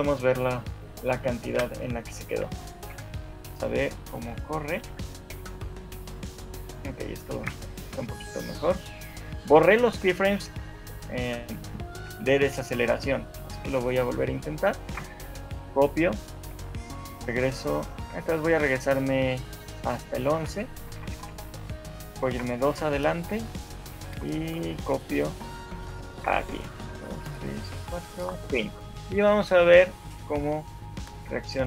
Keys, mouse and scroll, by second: 2.7 click, 2.7 shift+middle click, 4.1 right click, 4.5 right click, 4.9 alt+a, 7.5 Escape, 7.9 scroll up 3, 8.3 shift+middle click, 8.5 shift+middle click, 11.3 right click, 12.5 Left, 12.9 Left, 13.9-14.3 scroll down 4, 14.3 shift+middle click, 16.3 Left, 16.3 ctrl+c, 16.5 Left, 16.9 Left, 20.5 ctrl+v, 21.0 Right, 21.3 Right, 21.5 Right, 22.3 Right, 24.1 Right, 24.1 ctrl+c, 24.7 Right, 26.3 ctrl+v, 26.5 Left, 26.9 Left, 27.3 Left, 27.7 Left, 28.3 Left, 29.7 right click, 30.3 alt+a.